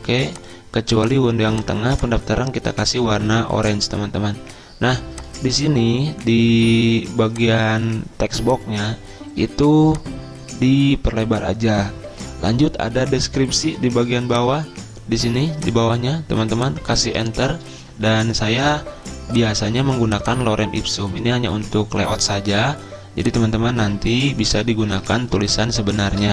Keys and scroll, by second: 17.1 Return, 18.8 super+m, 25.0 ctrl+c, 25.4 alt+Tab.